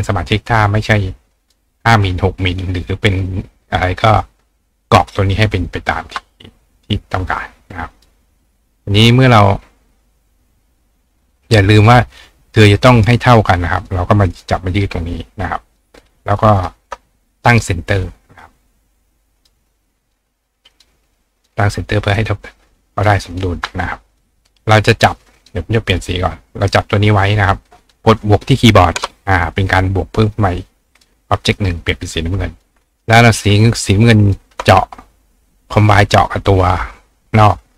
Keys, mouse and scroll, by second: 1.5-8.0 drag, 11.9-12.7 drag, 13.4-13.8 drag, 13.9-14.3 drag, 14.4 click, 15.8 click, 16.6-19.4 shift+drag, 19.5-20.7 drag, 20.8-21.4 drag, 21.5-22.2 drag, 22.2-23.0 drag, 23.4-24.1 drag, 24.2-25.4 drag, 25.5-25.9 drag, 26.0 click, 26.7-30.8 drag, 31.0 click, 31.7 click, 32.6-34.2 drag, 34.3-37.7 shift+drag.